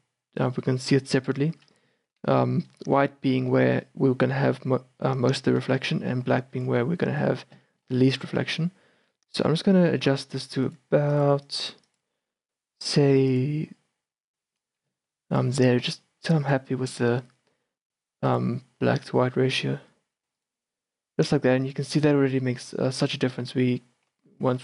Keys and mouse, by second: 2.1-5.7 middle drag, 5.7 shift+b, 7.8-10.7 middle drag, 10.7-15.8 drag, 15.1 shift+b, 15.8 shift+b, 18.3-24.5 drag.